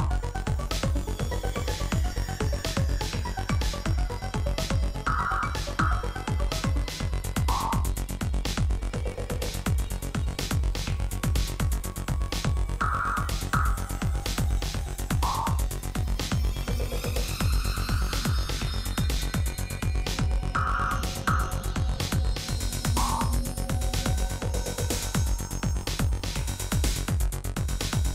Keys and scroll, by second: 4.3 3, 15.4 Tab, 15.9 alt+a, 22.5 Tab, 24.7 Tab, 25.7 alt+a.